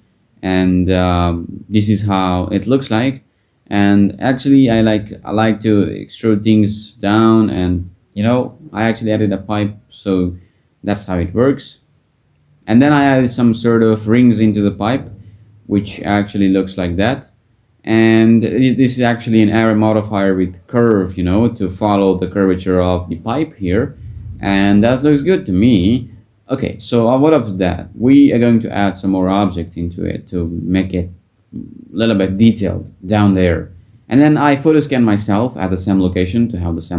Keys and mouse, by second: 1.0 Tab, 1.9 r, 3.2 e, 6.1 ctrl+z, 7.5 e, 11.3 click, 11.7 r, 12.6 e, 19.9 ctrl+z, 20.4 Tab, 21.3 click, 30.3 click.